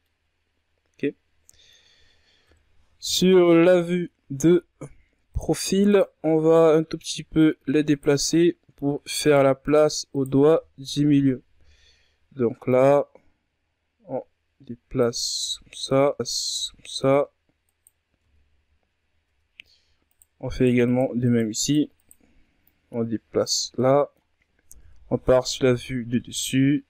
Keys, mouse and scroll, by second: 0.5 w, 1.1-3.5 middle drag, 3.5 KP_3, 4.4-4.8 ctrl+scroll down 1, 5.0-6.4 scroll up 1, 6.4 right click, 7.0 alt+right click, 7.8-9.0 drag, 9.0 alt+right click, 9.4 middle click, 10.3 shift+right click, 10.7 shift+right click, 11.2 shift+right click, 11.9 KP_3, 13.8-16.5 drag, 16.5 s, 18.1 Tab, 19.0 scroll up 1, 19.2 Tab, 20.0 right click, 20.5 shift+right click, 20.8 shift+right click, 21.2 shift+right click, 21.5 shift+right click, 21.9 shift+right click, 22.6 click, 23.6 scroll down 1, 23.7-24.7 middle drag, 24.7 KP_7, 25.8-26.8 ctrl+scroll up 3.